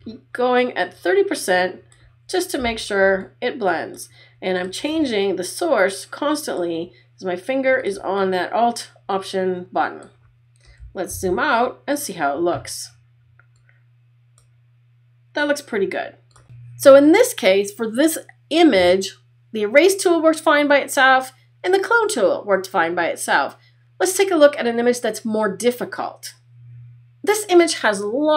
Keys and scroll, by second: 11.2 super+-.